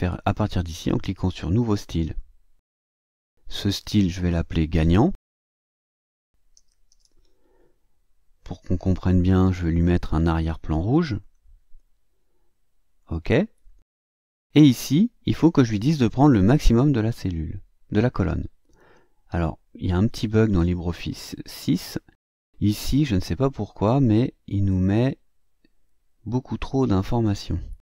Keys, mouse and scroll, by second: 2.0 click, 3.9 click, 5.2-7.4 typing, 10.1 click, 11.1 click, 13.0 click, 14.5 click, 19.4-21.0 drag, 22.0-22.6 drag, 22.9 click, 26.9 click.